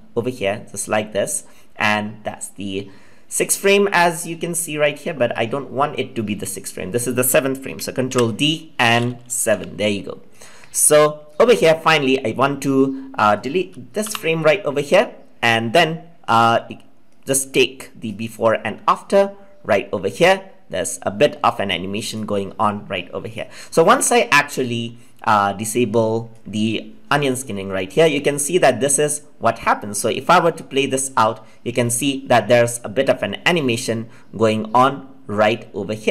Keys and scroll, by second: 8.0 ctrl+d.